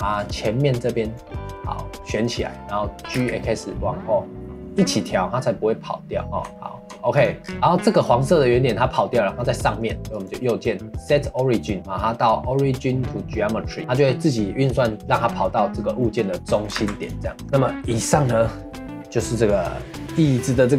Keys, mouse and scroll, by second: 3.0 g, 7.1 click, 7.4 scroll down 1, 7.5-10.1 middle drag, 10.1 right click, 16.0-16.4 middle drag, 16.4 scroll down 2, 16.5 middle click, 16.7 ctrl+s, 17.2 middle drag, 17.4 ctrl+s.